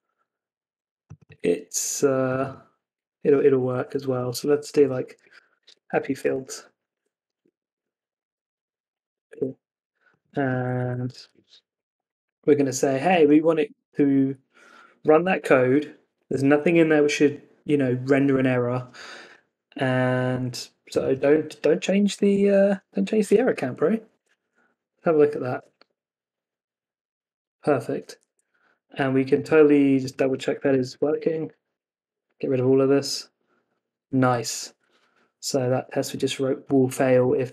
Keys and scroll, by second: 3.5 Left, 9.0 Escape, 9.2 super+s, 11.0 Escape, 11.2 super+s, 24.1 super+Tab, 24.6 Up, 25.5 Return, 28.2 super+Tab, 30.8 super+s, 31.0 super+Tab, 31.4 Up, 31.7 Return, 37.1 super+Tab, 37.4 Escape.